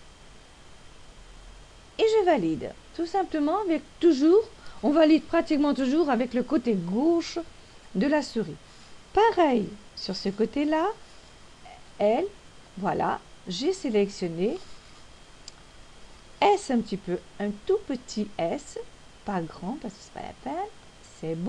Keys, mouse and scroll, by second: 13.1-13.7 l, 14.0 l, 20.1 s.